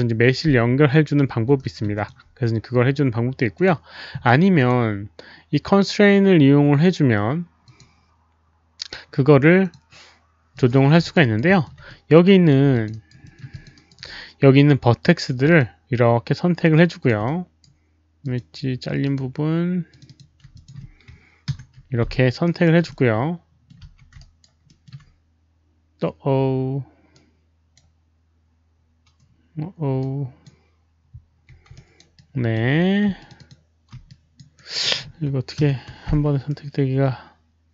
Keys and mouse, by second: 0.5 click, 1.5 alt+middle drag, 1.5 alt+right click, 1.9 alt+click, 3.0 alt+right click, 3.5 alt+click, 3.5 alt+middle click, 4.5 alt+click, 7.6 alt+click, 7.6 alt+middle click, 8.1 alt+middle click, 9.6 alt+click, 10.5 click, 10.6 alt+middle click, 11.0 alt+click, 11.1 alt+right click, 11.4 alt+middle click, 11.8 alt+right click, 12.7 alt+click, 12.8 alt+right click, 13.2 alt+middle click, 13.5 alt+click, 13.7 alt+right click, 13.8 alt+middle click, 15.5-17.0 alt+drag, 17.2 alt+right click, 18.2 alt+click, 18.2 alt+right click, 18.2 alt+middle click, 19.0 alt+click, 19.1 alt+right click, 19.1 alt+middle click, 19.8 alt+click, 20.0 click, 20.5 alt+click, 21.4 ctrl+F9, 22.4 alt+right click, 22.6 ctrl+F9, 22.6 alt+click, 22.8-23.6 middle drag, 23.8 z, 24.1 alt+right drag, 24.6 alt+middle click, 24.6 alt+click, 27.1-27.7 alt+right drag, 27.7 ctrl+F9, 27.7 alt+middle click, 27.7 alt+click, 27.7 z, 28.7 alt+right click, 28.7 alt+middle click, 28.7 z, 29.9 ctrl+F9, 29.9 alt+click, 29.9 alt+right click, 29.9 alt+middle click, 29.9 z, 31.7 alt+right drag, 32.1-32.5 alt+drag, 33.1 shift+click, 33.2 alt+right click, 33.2 alt+middle click, 33.2 shift+z, 33.3 shift+click, 33.4 alt+right click, 33.4 alt+middle click, 33.4 shift+z, 33.9 alt+right click, 33.9 alt+middle click, 33.9 z, 34.0 alt+shift+drag, 34.5 alt+right click, 34.8 alt+shift+click, 35.5 ctrl+F9, 36.4-37.7 middle drag.